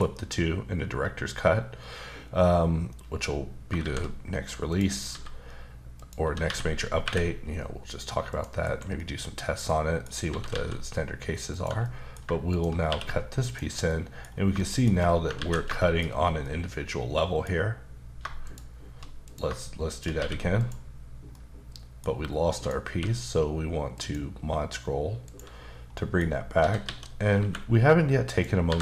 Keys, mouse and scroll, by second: 3.8 shift+a, 4.7 click, 5.1 s, 5.9 click, 6.4-7.0 typing, 8.3 click, 8.6 KP_Decimal, 9.0 middle click, 10.3 typing, 11.5 click, 11.8 middle click, 12.5 shift+click, 12.9 q, 13.4 click, 13.9 middle click, 14.3 scroll up 2, 14.7 shift+middle click, 14.9-15.2 scroll up 1, 15.4 ctrl+z, 15.8 shift+middle click, 16.2 scroll down 1, 16.4 middle click, 18.4 click, 19.9 click, 20.2 q, 20.6 click, 21.3 middle click, 22.5 click, 22.9 q, 23.9 click, 24.8-25.3 scroll down 1, 25.3 click, 25.9 middle click, 26.6-27.4 typing, 28.3 click, 28.7 typing.